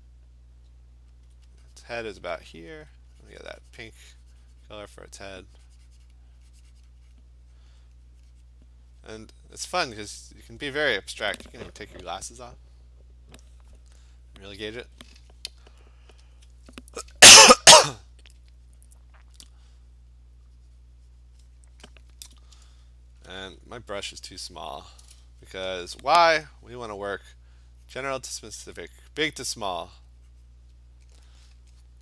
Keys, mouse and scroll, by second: 1.3 alt+click, 2.3 click, 2.9 alt+click, 5.0 click, 6.2 click, 7.2 click, 7.6 click, 7.9 click, 8.7 click, 9.1 click, 9.7 click, 9.9 click, 10.2 click, 16.4 alt+click, 17.9 click, 19.3 click, 19.8 click, 20.0 click, 20.9 alt+click, 21.5 click, 21.5 click, 22.6-23.3 ], 23.5 ], 23.9 click, 24.1 click, 24.4 click, 24.7 click, 24.9 click, 27.3-27.7 alt+click, 27.7 click, 28.0 click, 30.0 alt+click, 30.5 click.